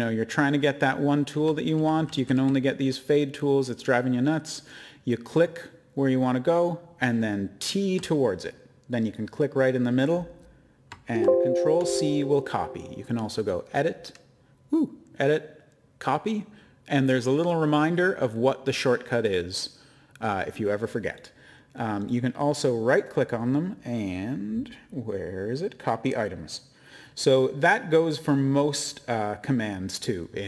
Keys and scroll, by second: 2.0-2.8 typing, 5.0-5.8 typing, 7.0-7.8 typing, 9.3 typing, 11.1 ctrl+c.